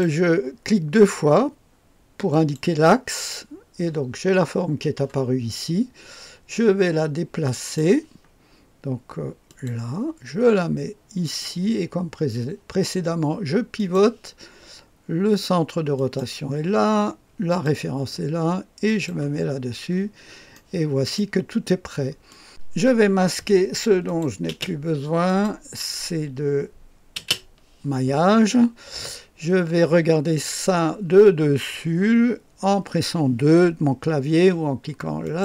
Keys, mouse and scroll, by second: 2.3 click, 7.5 click, 9.5 click, 11.2 click, 11.6 click, 13.8 click, 16.0 click, 17.5 click, 18.9 click, 19.5 click, 19.9-20.6 scroll up 2, 20.6 click, 21.5-22.3 scroll down 2, 22.3 click, 24.1 click, 24.5 space, 25.3 click, 25.8 click, 27.2 space, 35.2 click.